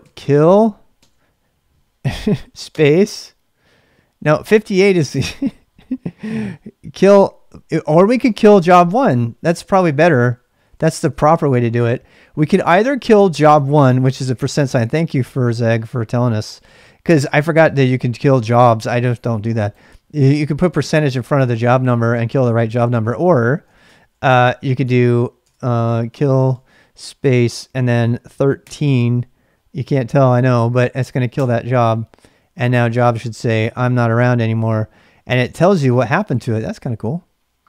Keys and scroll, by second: 0.0-1.0 typing, 2.7 space, 9.1-11.1 typing, 9.8 ctrl+c, 23.7 Return, 23.8 Return, 24.8 Return, 25.4 Return, 25.7-26.9 typing, 28.0-28.7 typing, 31.3 Return, 32.3-33.3 typing.